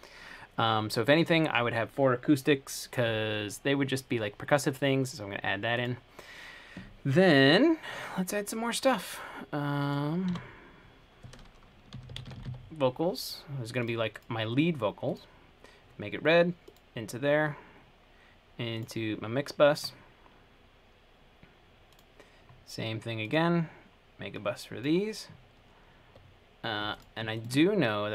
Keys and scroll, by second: 11.9-13.1 typing.